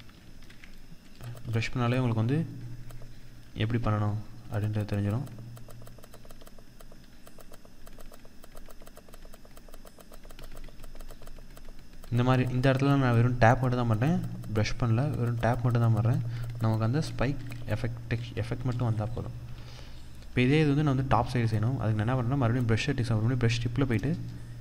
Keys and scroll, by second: 3.0 ctrl+z, 18.9 ctrl+-, 21.1 ctrl+-.